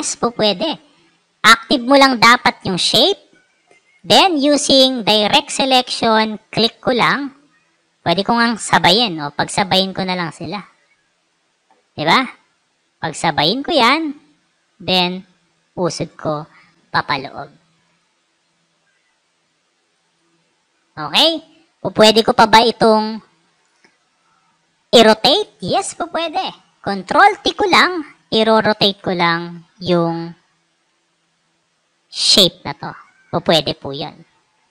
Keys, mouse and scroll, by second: 1.3 click, 3.6 click, 3.8 right click, 5.0 click, 6.7 click, 7.6-8.7 drag, 9.5-11.2 drag, 12.4 click, 15.1-16.3 drag, 17.1 click, 17.7 click, 19.7 click, 19.9 click, 23.4 right click, 24.0 click, 24.9 click, 27.2 ctrl+t, 28.1-34.3 drag.